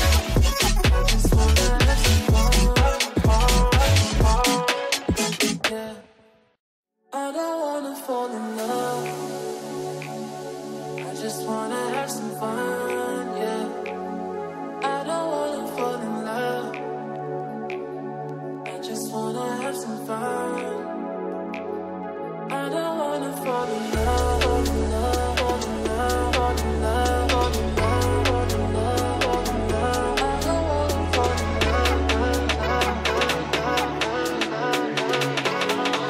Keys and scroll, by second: 2.7 ctrl+g, 4.9 ctrl+u, 5.6 c, 6.3 ctrl+g, 7.6 c, 11.5 F3, 12.8 Escape, 16.3 g, 17.9 space, 20.3 shift+F2, 20.5 Escape, 26.0 Escape, 28.8 g, 32.0 space, 32.4 Escape, 33.4 F2.